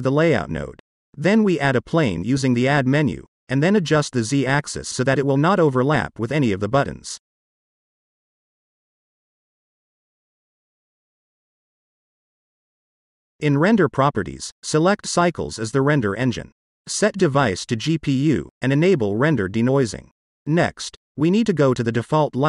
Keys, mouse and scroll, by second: 0.2-0.7 scroll down 1, 0.7 middle click, 2.3-5.2 drag, 6.1-6.7 middle drag, 7.4-11.4 drag, 11.7-12.9 middle drag, 13.8 click, 14.3 click, 14.9-16.0 drag, 16.6-17.3 drag, 18.4 click, 19.2 click, 21.0 click, 22.0 click.